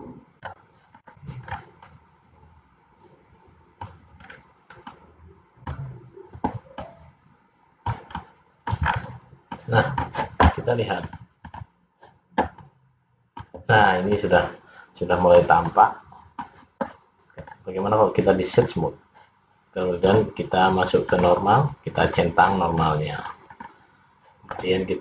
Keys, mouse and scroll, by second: 1.1 click, 1.6-2.0 scroll down 3, 2.0 middle click, 4.4 scroll up 3, 5.1 middle click, 6.8 middle click, 9.0-9.3 scroll down 4, 9.7 middle click, 11.2 click, 14.2 middle click, 17.6 right click, 20.1 click, 21.3 click, 22.2 click, 22.9 middle click, 23.7 click.